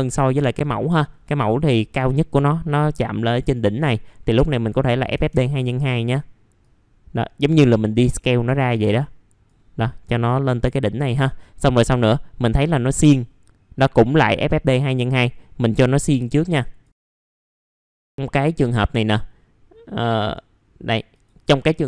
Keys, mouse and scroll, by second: 3.5-10.3 drag, 10.8 middle click, 13.1-17.0 drag, 17.0-17.3 scroll up 1, 17.3 middle click, 17.5-18.8 scroll down 1, 18.8 middle click, 18.9-20.2 scroll down 1, 20.2 right click, 21.1 click.